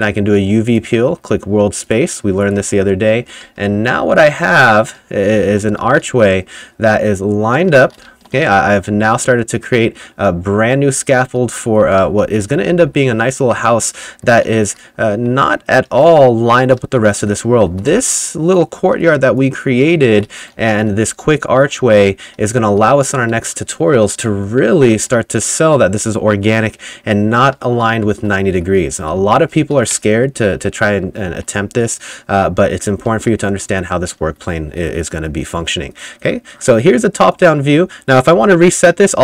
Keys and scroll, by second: 2.6-9.4 typing, 11.3-23.9 typing, 27.6-34.8 typing, 35.4 F2, 38.4 F5.